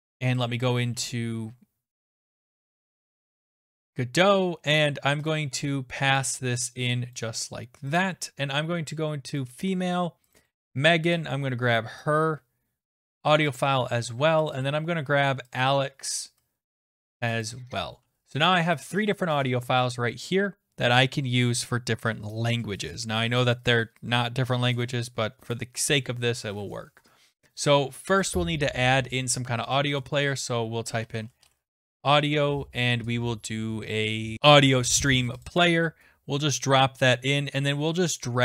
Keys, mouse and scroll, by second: 0.5 click, 2.9 click, 3.9 click, 5.3 click, 7.2 click, 8.0 click, 9.4 click, 10.4 click, 10.5 click, 12.0 click, 13.6 click, 14.5 click, 14.6 click, 15.5 click, 15.7 click, 17.4 click, 19.1 click, 28.3 right click, 29.7 click, 30.7-31.9 typing, 35.5 click, 35.6 click.